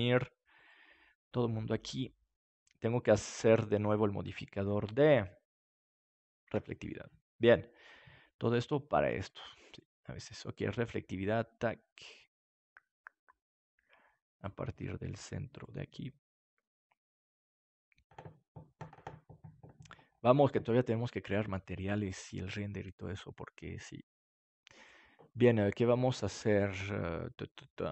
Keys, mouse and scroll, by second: 7.8 Tab, 9.1-13.0 drag, 14.3-16.8 drag, 24.1-26.0 drag.